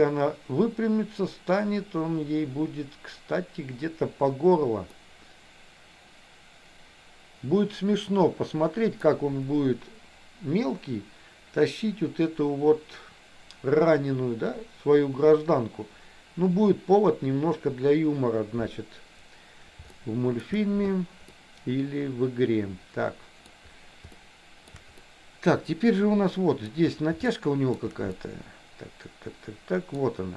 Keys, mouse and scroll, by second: 5.0 scroll up 1, 5.2-9.2 middle drag, 20.1 shift+scroll up 1, 20.3 shift+middle click, 20.6 shift+scroll down 1, 21.5-23.5 middle drag, 24.2 shift+middle click, 25.2-26.8 middle drag, 27.5 shift+middle click, 28.3-30.0 middle drag.